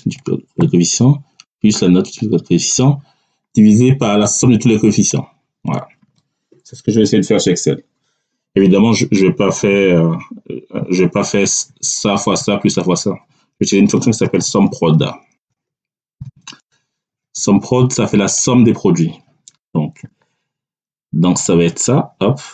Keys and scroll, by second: 9.6 =, 13.6 s, 13.8 o, 14.1 m, 15.2 e, 16.1 p, 16.5 r.